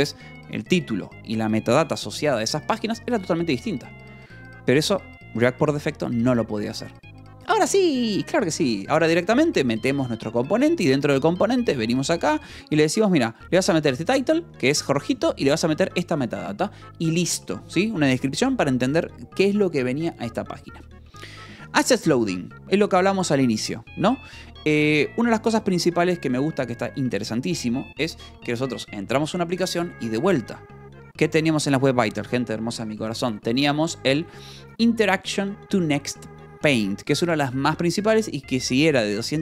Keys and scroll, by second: 11.6-14.4 typing, 14.0 Escape, 15.6 v, 16.1 Escape, 21.3 j.